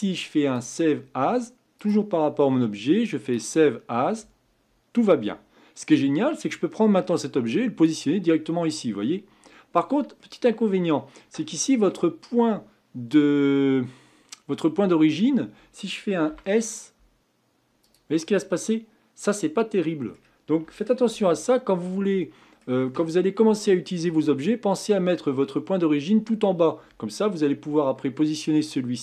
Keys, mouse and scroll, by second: 6.4-7.8 drag, 10.2-16.3 middle drag, 16.3 s, 18.2-21.1 middle drag, 21.1 ctrl+z, 22.0-25.2 middle drag, 27.8-28.6 scroll down 2, 28.6-29.0 middle drag.